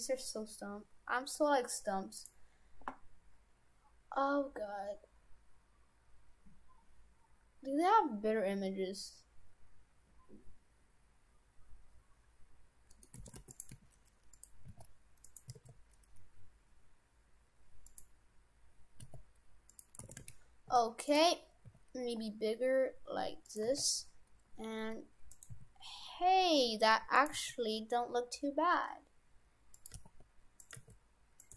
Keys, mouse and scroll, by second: 12.9 middle click, 13.2 shift+f, 13.8 s, 14.6 s, 15.5 s, 18.5 s, 19.2 s, 20.1 shift+f, 21.7 s, 23.7 s, 25.6 s, 27.4 s, 30.0 g, 30.8 g.